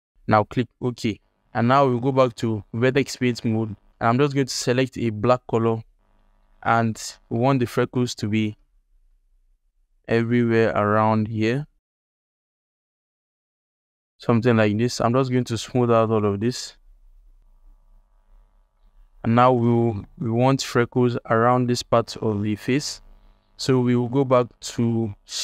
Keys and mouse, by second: 1.8 ctrl+Tab, 6.0 ctrl+alt+middle click, 6.4 alt+middle click, 6.7 f, 7.2 shift+middle click, 7.9 click, 8.6 shift+f, 9.4-11.8 drag, 11.9 f, 12.0-13.0 drag, 13.0 f, 13.2-15.1 drag, 15.3 alt+middle click, 15.8-17.8 shift+drag, 18.1 ctrl+alt+click, 18.7 alt+click, 19.5 ctrl+click, 19.9 alt+click, 20.5 click, 21.6 click, 22.5 ctrl+Tab, 23.1 ctrl+alt+drag, 25.2 alt+shift+click.